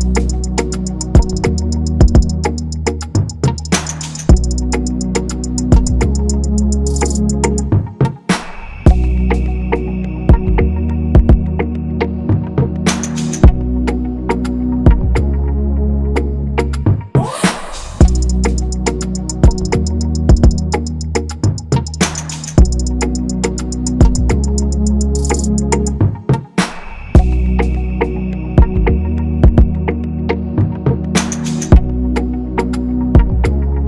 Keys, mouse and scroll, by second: 2.1-2.4 scroll, 3.2-3.9 scroll, 3.9-4.5 scroll, 4.3-5.7 typing, 17.5 typing, 24.7 typing, 24.8 ctrl+=, 24.9 ctrl+=, 25.0 ctrl+=, 25.1 ctrl+=, 25.6 ctrl+-, 31.1 ctrl+z, 32.7 scroll.